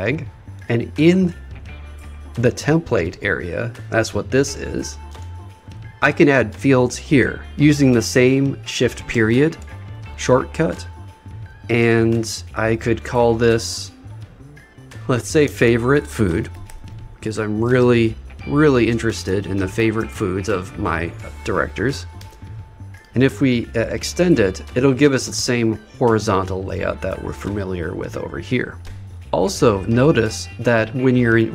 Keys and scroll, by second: 9.1 shift+., 14.9 shift+f, 19.3 shift+f.